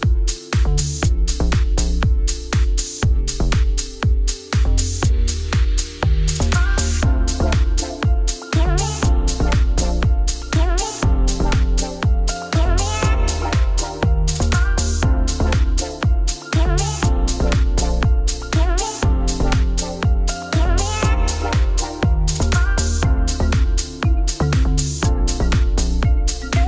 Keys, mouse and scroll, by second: 0.7 middle click, 1.3 Tab, 1.9 shift+middle click, 2.2 Tab, 2.3 3, 2.4 click, 3.2 shift+d, 3.5 p, 3.7 Tab, 4.0 click, 4.3 click, 4.5 shift+click, 4.8 ctrl+KP_Subtract, 5.1 click, 5.3 middle click, 5.5 Tab, 5.8 a, 7.1 shift+middle click, 7.3 scroll up 1, 7.6-9.0 shift+middle drag, 10.4 shift+d, 10.9 p, 11.1 Tab, 11.3 click, 11.5 Tab, 11.7 a, 16.0 Tab, 16.1 click, 16.2 Tab, 16.4 click, 17.0 shift+d, 17.3 p, 17.4 Tab, 17.6 click, 17.8 Tab, 18.3 ctrl+r, 19.2 middle click, 19.3 ctrl+b, 20.7 middle click, 21.4 3, 21.5 ctrl+i, 21.6 x, 24.0 Tab, 24.1 scroll down 3, 24.2 middle click, 24.3 click, 24.5-26.1 middle drag, 26.1 scroll up 1.